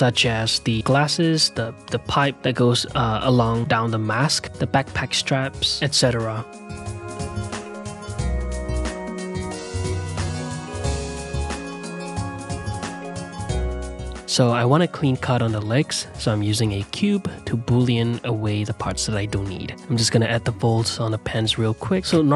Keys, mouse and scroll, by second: 0.3 click, 1.0 ctrl+middle click, 1.0 click, 1.6 middle click, 1.7 click, 1.9 shift+middle click, 2.0 click, 2.3 shift+middle click, 2.4 click, 2.6 middle click, 2.8 click, 2.9 ctrl+z, 3.1 shift+middle click, 3.5 click, 3.8 g, 4.2 middle click, 4.8 e, 5.0 e, 5.5 middle click, 5.6 click, 6.2 e, 6.7-7.0 middle drag, 7.0 ctrl+2, 7.3 q, 7.8 Tab, 8.0 ctrl+a, 8.7 ctrl+z, 9.0 ctrl+click, 9.8 middle click, 10.0 ctrl+z, 10.1 ctrl+click, 10.4 middle click, 10.7 click, 10.8 ctrl+middle click, 11.0 click, 11.0 ctrl+middle click, 11.1 click, 11.3 middle click, 11.5 2, 11.5 ctrl+click, 11.6 middle click, 11.8 click, 11.8 middle click, 11.9 click, 12.2 middle click, 12.3 2, 12.3 ctrl+click, 12.4 middle click, 12.5 click, 12.6 middle click, 12.7 ctrl+click, 13.1 2, 13.2-14.6 middle drag, 14.6 s, 14.9 g, 15.3 middle click, 15.7 q, 16.7 click, 18.0 click, 19.1 x, 19.7 ctrl+z, 19.9 click, 20.0 middle click, 20.2 f, 20.5 ctrl+z, 20.5 click, 21.0 ctrl+z, 21.1 shift+click, 21.5 ctrl+z, 21.6 ctrl+click, 21.7 ctrl+z, 21.9-22.3 ctrl+drag.